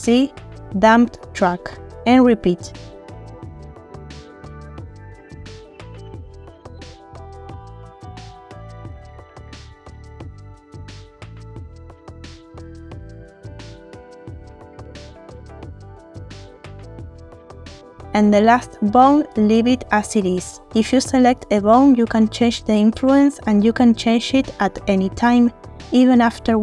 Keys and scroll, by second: 3.0 ctrl+shift+c, 6.4 ctrl+shift+c, 7.0 ctrl+shift+c, 9.5 ctrl+shift+c, 11.5 ctrl+shift+c, 13.2 ctrl+shift+c, 13.8 ctrl+shift+c, 15.0 ctrl+shift+c, 16.7 ctrl+shift+c, 18.5 ctrl+shift+c, 24.0 3, 24.7 Return.